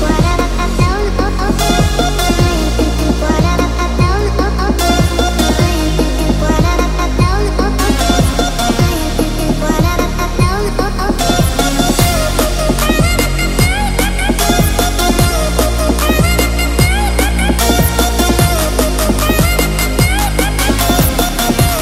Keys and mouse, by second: 1.5 g, 3.7 click, 4.7 middle click, 6.2 KP_7, 7.5 click, 8.9 shift+click, 9.9 KP_1, 11.5 shift+click, 12.3 x, 13.3 click, 13.6 ctrl+r, 17.2 click, 20.0 3, 20.3 click, 20.7 click, 21.5 shift+click.